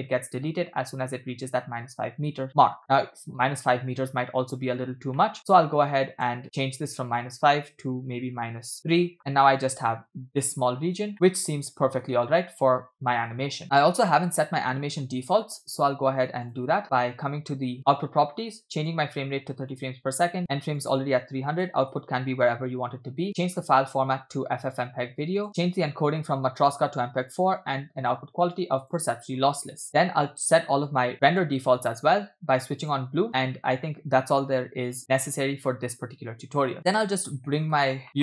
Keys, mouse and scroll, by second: 5.2 shift+middle drag, 6.3 space, 6.4 middle click, 6.5-7.0 scroll up 2, 7.1-8.8 drag, 9.2 shift+middle click, 9.7 space, 11.1-12.1 shift+middle drag, 13.3 space, 13.6-13.9 scroll up 2, 14.1 shift+middle click, 14.5 middle click, 16.5 click, 18.8-19.9 drag, 20.8-22.1 drag, 21.8 /, 22.7-23.0 scroll down 2, 23.5-24.0 drag, 24.7-25.5 drag, 25.6 drag, 25.8-26.4 scroll down 2, 26.6-27.4 drag, 28.1-29.0 drag, 29.8 scroll down 3, 29.9 scroll up 8, 31.3 click, 32.9 click, 36.8-37.8 middle drag.